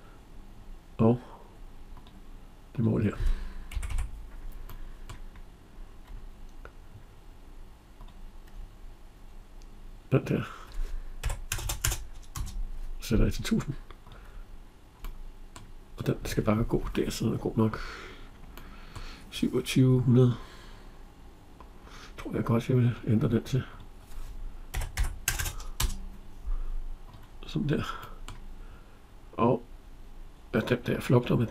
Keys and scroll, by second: 3.5 Escape, 12.2 Return, 25.5 Return.